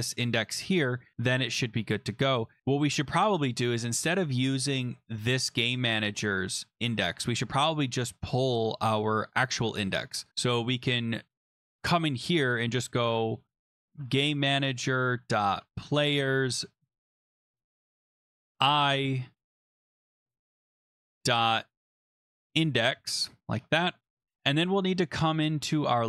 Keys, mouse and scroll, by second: 5.3 right click, 6.0 click, 7.5 click, 7.6 click, 13.3-18.5 typing, 18.8 Right, 18.8 Page_Down, 20.0 click, 20.2 Right, 20.8 ., 21.9-22.9 typing, 24.0 ctrl+s, 25.7 click.